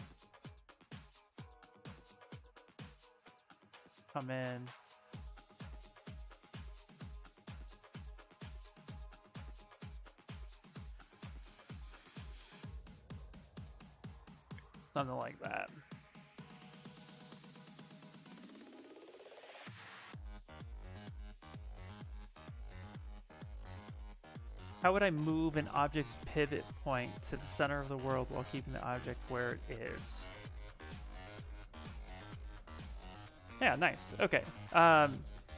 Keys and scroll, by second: 0.1 s, 8.9 s, 13.9 s.